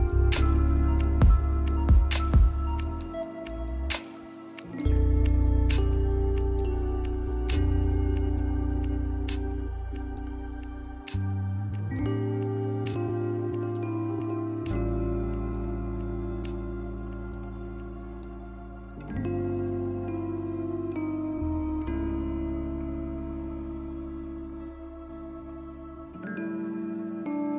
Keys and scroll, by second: 7.8 scroll down 1, 8.0 scroll up 1, 11.5 scroll down 1, 11.6 scroll up 1, 15.2 scroll up 1, 15.4 scroll down 1, 18.9 [, 19.1 ], 21.7 [, 23.9 scroll down 1, 24.2 scroll up 1, 26.5 ].